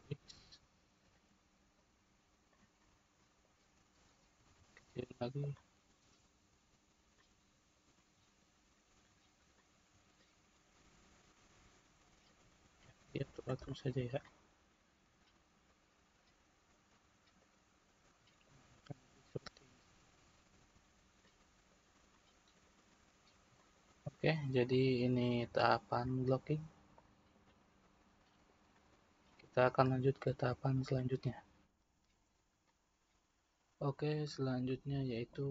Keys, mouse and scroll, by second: 1.7 click, 2.8-4.4 middle drag, 4.4 s, 6.2 click, 7.9-8.9 middle drag, 8.9 click, 9.5-10.9 middle drag, 10.9 click, 11.6 click, 12.8 click, 13.6-15.6 middle drag, 15.6 click, 17.3 click, 18.7 click, 19.1-20.8 middle drag, 20.8-21.2 scroll down 2, 21.2-30.8 middle drag, 32.7-35.5 scroll down 1.